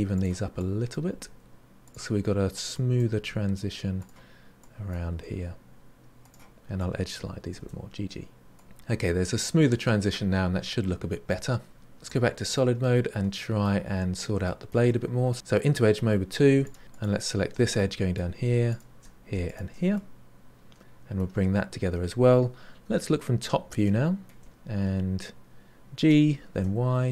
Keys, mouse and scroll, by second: 0.5 click, 2.7 click, 4.5 click, 6.7 click, 12.1 click, 12.5-13.8 middle drag, 13.8-14.4 scroll down 1, 14.4 middle click, 15.3 3, 16.6 alt+click, 16.8 2, 16.9 alt+click, 17.7 middle click, 18.6 alt+shift+click, 19.4 alt+shift+click, 19.9-22.8 middle drag, 22.8 KP_7, 23.8 shift+middle click, 24.4-26.0 scroll up 4, 26.0 g.